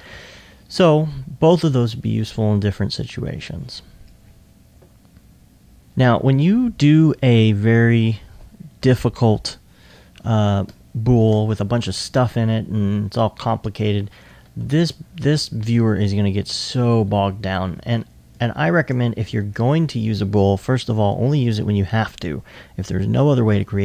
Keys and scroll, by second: 19.3 alt+1.